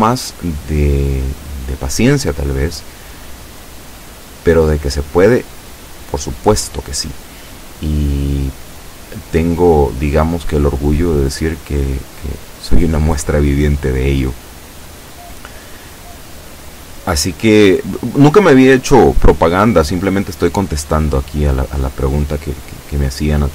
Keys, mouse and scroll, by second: 0.5-4.3 drag.